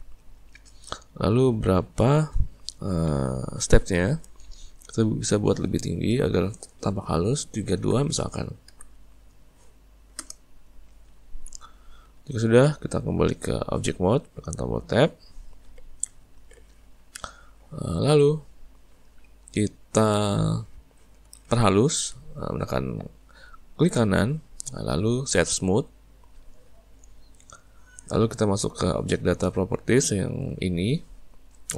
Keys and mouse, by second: 4.6-7.7 drag, 14.1 Tab, 14.7-16.4 middle drag, 16.4 alt+a, 16.7-19.1 middle drag, 19.1 click, 20.9-23.8 shift+middle drag, 23.8-26.9 right drag.